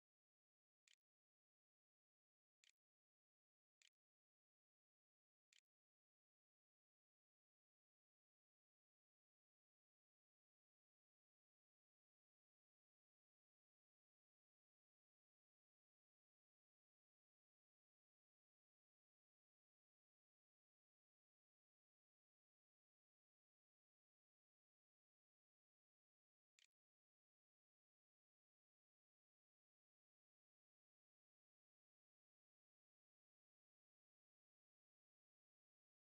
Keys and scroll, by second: 0.0-1.9 typing, 2.0 Return, 2.8 shift+Return, 3.0 shift+\, 3.6 shift+0, 24.1-25.3 typing, 26.4 Return, 28.5-29.3 typing, 31.0 Tab.